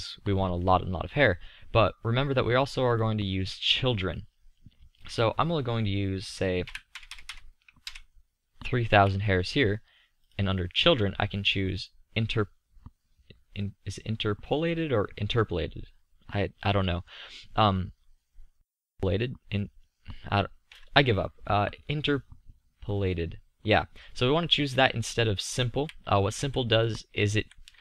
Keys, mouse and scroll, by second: 7.2 KP_0, 13.7-25.7 middle drag, 26.3 z, 27.3 z.